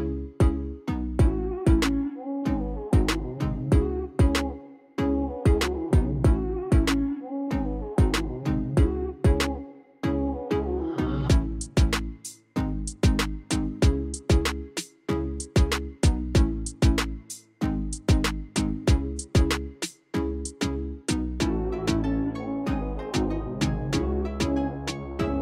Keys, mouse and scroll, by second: 3.7 click, 13.8 click.